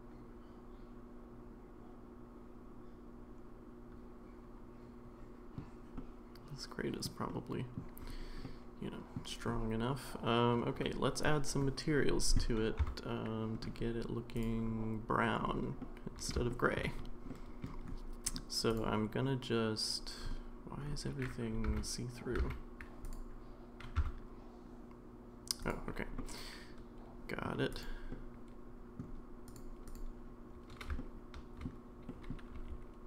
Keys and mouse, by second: 5.9-7.0 middle drag, 7.3-7.7 middle drag, 8.4-9.1 middle drag, 12.8 Tab, 14.6 Tab, 15.8 middle click, 16.5 shift+middle click, 17.4 middle click, 21.7 alt+z, 22.4 alt+z, 24.0 Tab, 26.2-27.4 middle drag, 28.1-29.0 middle drag, 29.5 click, 31.0-31.6 shift+middle drag, 32.1 middle drag, 32.5 r.